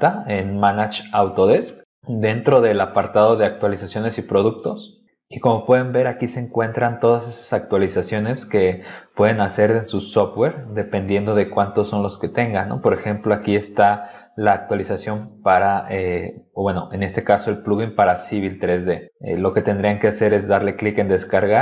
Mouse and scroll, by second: 3.6 click, 7.7 scroll down 2, 8.2 middle click, 8.9 middle click, 9.4 scroll down 2, 10.1 middle click, 11.9 middle click, 12.4 middle click.